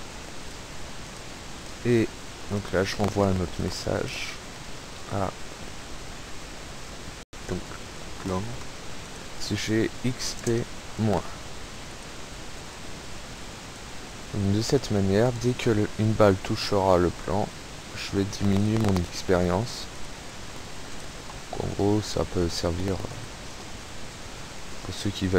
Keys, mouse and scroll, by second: 0.0-0.1 typing, 0.0 click, 1.2 click, 1.6 click, 2.5 click, 3.8 click, 5.1 click, 8.2 click, 9.0 click, 9.6-10.4 typing, 10.8-12.3 drag, 12.7-14.0 drag, 14.6 click, 16.8-17.9 ctrl+shift+scroll down 5, 18.6 click, 19.0 click, 20.0 click, 21.0 click, 22.5 click, 23.1 click, 25.2 scroll up 2.